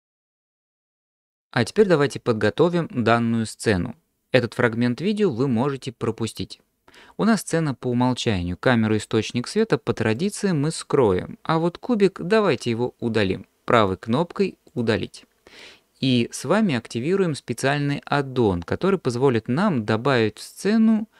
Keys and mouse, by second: 9.5 click, 10.2 click, 13.9-14.8 right drag.